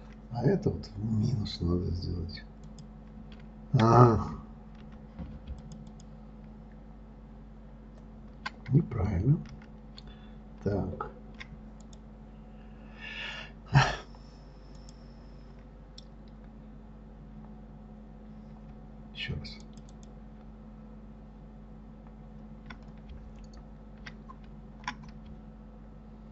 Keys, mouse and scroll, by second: 3.1 click, 6.0 ctrl+click, 6.2 ctrl+click, 12.2 click, 15.2 click, 20.0 shift+click, 20.3 shift+click.